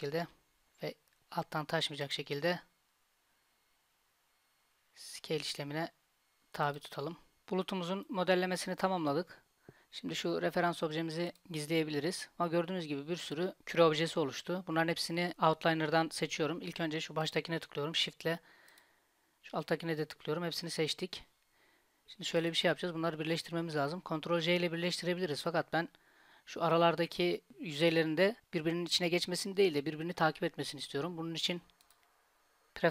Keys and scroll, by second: 0.3 s.